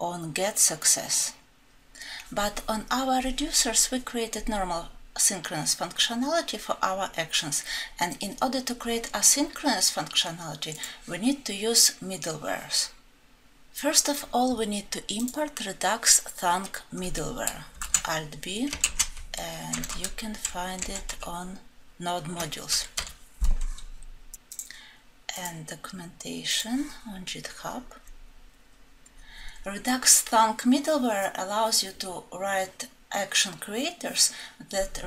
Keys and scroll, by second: 17.9 ctrl+b, 18.8 alt+Home.